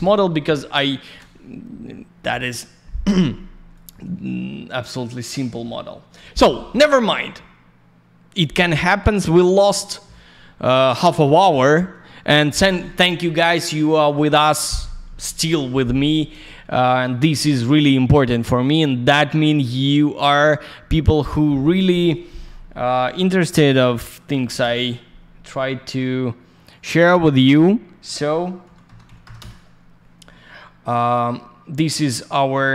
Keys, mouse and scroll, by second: 3.4 Tab, 3.7 click, 3.8 click, 5.3 middle click, 5.4 middle click, 16.7 alt+middle click, 19.5 click, 24.3 2, 24.6 Return, 26.6 click, 29.3 Return.